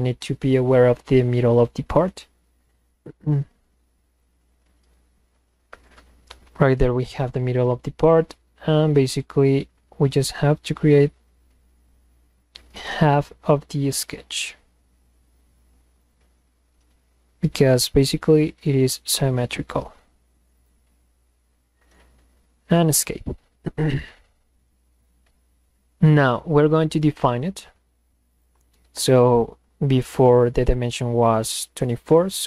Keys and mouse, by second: 1.7 click, 4.1 click, 5.6 Escape, 5.8 Escape, 6.5 click, 8.6 click, 10.6 click, 12.4 click, 14.0 click, 16.0 click, 18.0 click, 20.6 click, 22.1 Escape, 22.8 click, 27.1 click, 28.4 click, 30.0 click.